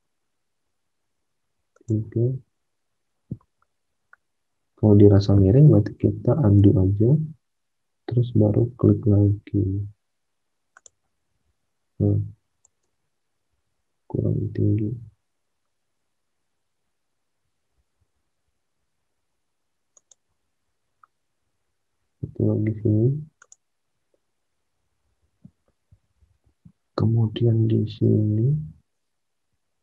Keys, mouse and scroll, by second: 6.4 ctrl+z, 12.8 ctrl+z, 13.4 ctrl+z, 25.0 alt+Tab, 26.2 alt+Tab.